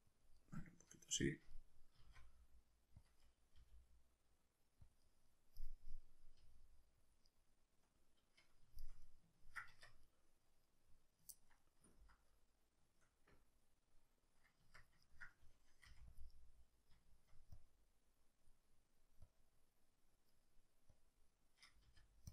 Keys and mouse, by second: 0.2 click, 0.4-1.7 middle drag, 1.9 s, 3.1 click, 3.2 middle click, 3.6 g, 4.9 click, 5.0 middle click, 5.6-7.1 middle drag, 6.4 g, 7.1 click, 7.3-17.5 middle drag, 9.7 Tab, 14.6 Tab, 15.9 f, 16.2 click, 17.5-18.7 drag, 18.7 middle click, 19.3-20.3 drag, 20.3 middle click, 20.9-22.3 drag, 21.9 f.